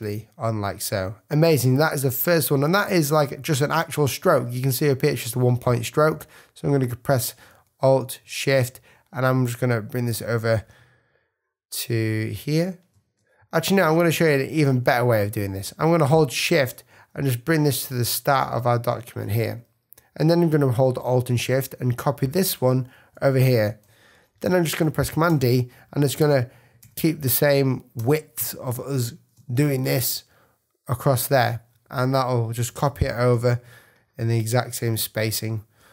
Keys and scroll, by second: 13.5 alt+shift+super+z, 13.8 super+space, 24.5 super+-, 25.2 super+d, 28.0 super+d, 28.7 super+space, 29.2 space, 29.7 super+z, 30.8 super+z, 32.6 super+=, 33.6 super+space, 34.9 space.